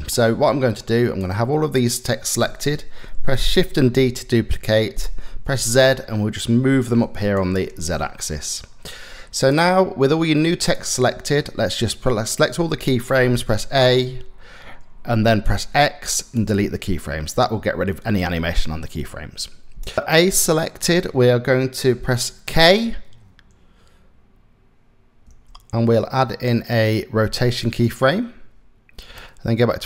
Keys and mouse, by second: 0.9 click, 3.4 shift+d, 9.0 click, 9.7 click, 11.5 click, 13.1 a, 15.1 x, 16.9-19.4 drag, 24.9 k, 28.8-29.8 drag.